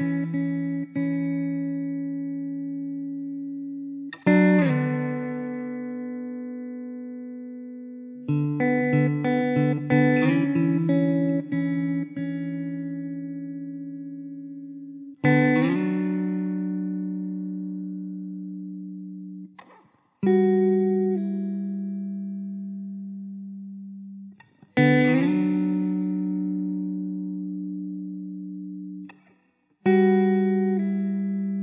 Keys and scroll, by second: 3.4 Tab, 3.9 Tab, 5.1 Tab, 5.4 1, 5.9 alt+z, 7.2 ctrl+z, 8.9 Tab, 9.3 Tab, 11.2 Tab, 11.8 alt+z, 14.8 Tab, 15.9 ctrl+z, 21.8 Tab, 22.1 Tab, 26.2 Tab, 26.5 Tab, 28.4 Tab, 28.6 Tab, 31.0 ctrl+j.